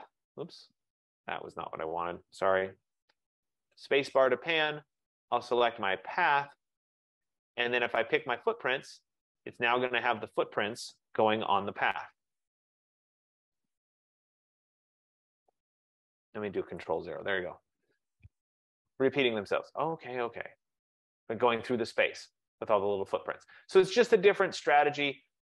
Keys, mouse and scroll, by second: 0.1-1.3 scroll, 0.5-3.3 click, 2.7-5.1 ctrl+z, 5.1 click, 5.3 click, 6.7 click, 8.5 click, 11.7 super+-, 12.2 super+-, 15.4 super+-, 16.2 ctrl+-, 16.9 ctrl+0, 18.6 click, 20.3 click, 25.0 click.